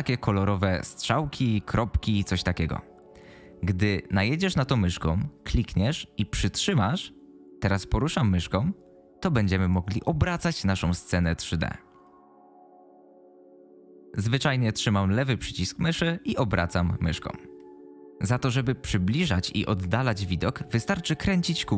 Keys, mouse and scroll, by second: 5.5-18.0 drag.